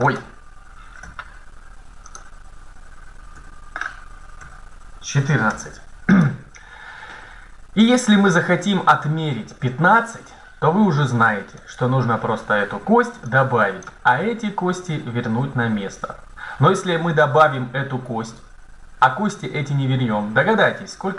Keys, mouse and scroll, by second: 0.0 click, 0.3 click, 0.8 Tab, 0.8-1.9 drag, 3.2 BackSpace, 4.3 KP_4, 5.3 Tab, 11.5-15.0 drag.